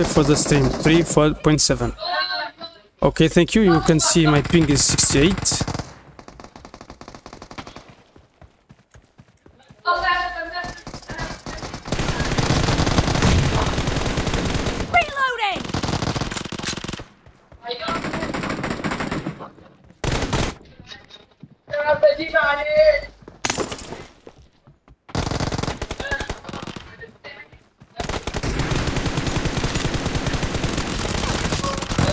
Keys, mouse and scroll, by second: 2.6 click, 4.3 right click, 4.6-5.4 typing, 6.7 d, 7.8 d, 8.1 a, 8.8 a, 9.6 space, 11.3-14.3 right drag, 11.4-14.3 drag, 11.5-16.2 typing, 14.4 middle click, 17.5 d, 18.8-20.5 typing, 19.5-20.5 drag, 23.4-24.5 typing, 25.8 a, 26.7 d, 27.5 a, 28.1-30.4 right drag, 28.2-30.4 drag, 29.0-32.1 typing.